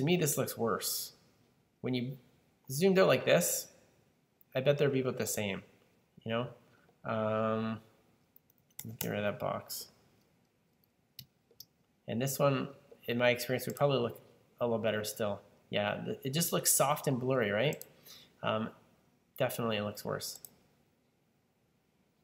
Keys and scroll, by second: 8.5 super+z, 8.7 super+z, 8.9 super+z, 11.5 super+z.